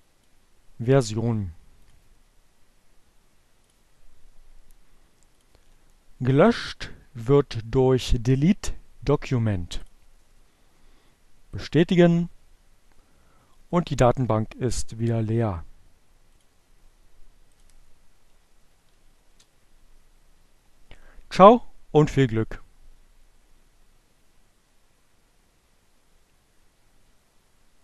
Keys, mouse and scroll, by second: 1.4 click, 3.1 click, 4.8 click, 6.9-9.1 drag, 10.3 click, 13.9 click, 17.1 click, 18.5 click, 19.4 Up, 20.0 Return.